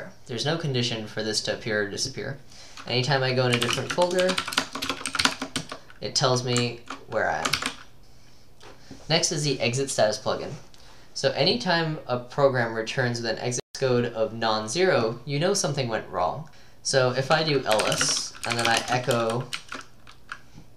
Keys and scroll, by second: 3.4-5.6 typing, 7.6 ctrl+k, 17.5-20.7 typing.